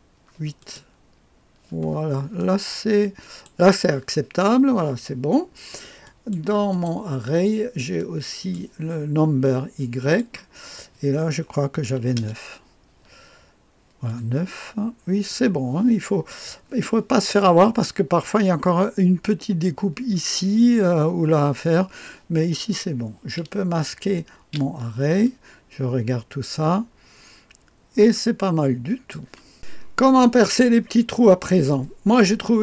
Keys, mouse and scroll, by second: 0.6 click, 2.3-3.8 drag, 6.0-7.4 drag, 7.9-9.0 drag, 9.9 click, 11.8 KP_9, 12.1 Return, 14.0 click, 14.7-15.8 drag, 17.2 click, 24.3 space, 25.2-29.1 drag, 30.7-31.6 scroll up 1, 31.7-32.6 drag.